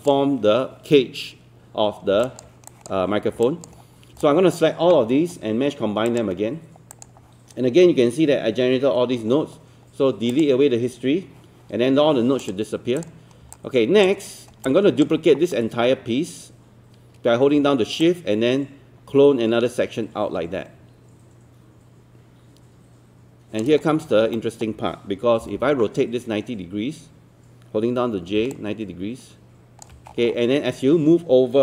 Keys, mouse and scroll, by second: 1.9 scroll down 1, 2.3 alt+click, 3.5 alt+click, 4.2 alt+click, 13.5 alt+click, 14.7 alt+click, 18.0-23.6 shift+drag, 24.0 scroll down 1, 24.4 alt+middle click, 25.4 e, 28.5-30.1 drag, 28.9-29.9 typing, 30.1 scroll up 1.